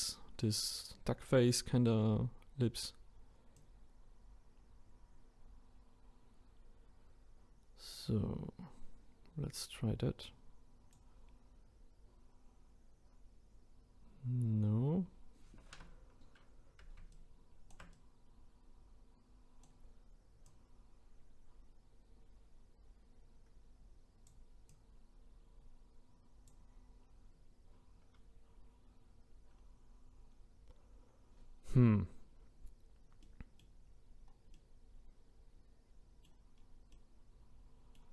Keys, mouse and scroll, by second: 26.6-27.8 drag, 29.6-30.3 scroll down 2, 30.3-32.4 scroll up 1, 33.2-38.1 middle drag.